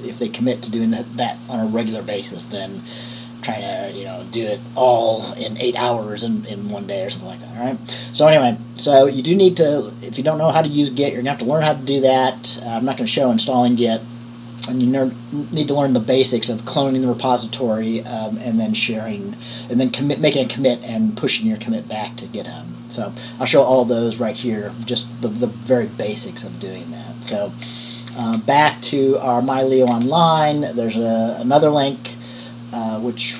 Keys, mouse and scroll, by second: 26.5 click, 27.5 scroll down 1, 28.1 scroll down 2, 28.4 scroll up 1, 28.5 scroll down 1, 30.2-33.2 scroll down 1.